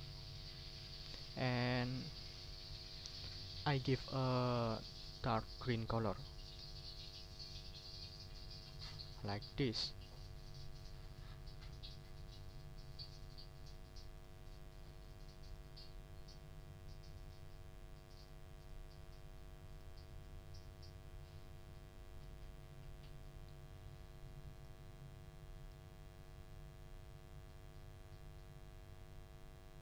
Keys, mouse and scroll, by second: 1.6 click, 2.1 ctrl+scroll up 2, 2.6 ctrl+click, 6.6 d, 7.8 shift+click, 8.8 ctrl+shift+scroll down 3, 12.3 click, 12.9 click, 13.6 click, 14.1 click, 15.0 shift+click, 15.4 shift+click, 17.2 click, 18.2 click, 18.6 click, 19.7 click, 22.1 click, 22.8 ctrl+scroll down 1, 23.2 ctrl+middle click, 24.5 click, 25.6 click, 26.8-29.8 drag.